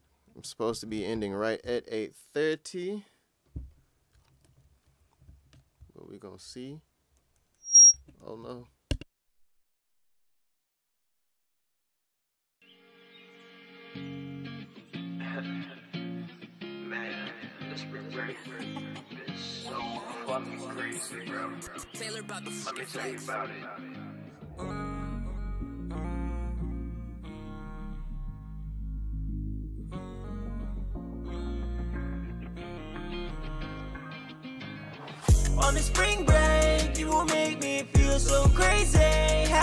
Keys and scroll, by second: 0.9 Escape, 4.4 Escape, 11.7 Return, 11.9 space.